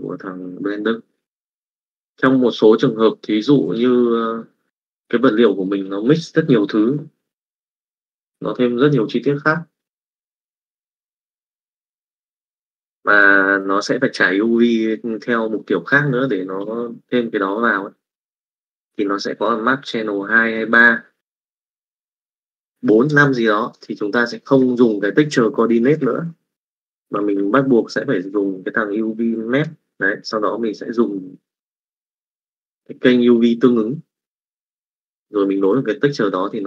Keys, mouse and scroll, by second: 22.6 click, 23.6 middle click, 24.5 middle click, 25.1 click, 26.1 click, 26.9 shift+a, 30.3-31.9 drag, 32.3-34.8 drag, 35.3 middle click, 36.5 middle click.